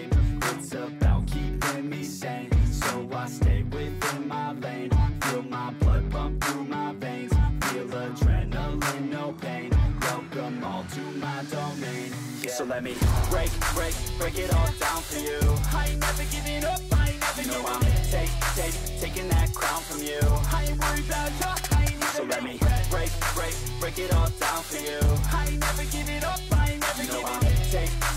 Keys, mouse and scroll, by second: 0.5 Right, 0.8 space, 1.1 s, 2.1 Return, 11.4 double click, 19.6 ctrl+d, 26.1 ctrl+d.